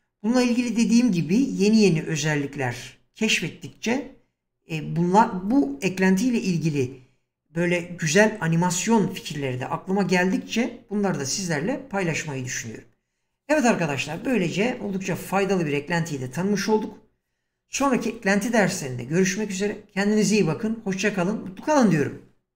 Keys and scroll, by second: 0.8 h.